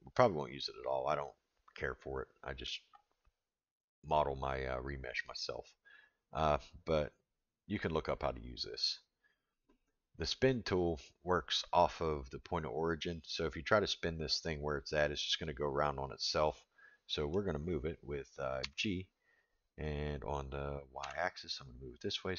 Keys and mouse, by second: 10.2 click, 12.4-13.4 middle drag, 14.0-14.4 middle drag, 16.5-17.3 middle drag, 18.6 g.